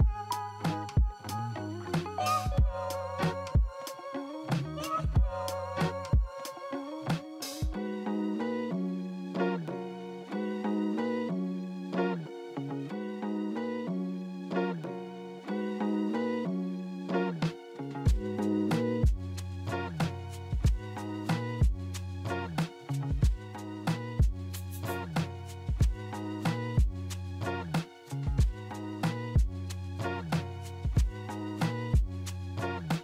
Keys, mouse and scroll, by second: 0.8-1.6 typing, 2.9-3.7 typing, 5.3-6.2 typing, 6.7 alt+middle click, 10.7-11.9 typing, 14.4-15.3 typing, 15.4 Return, 16.2 alt+middle click, 18.8 double click, 21.4 right click, 21.8 right click, 23.1 right click, 23.5 right click, 24.5 right click, 25.1 middle click, 31.1 alt+middle click.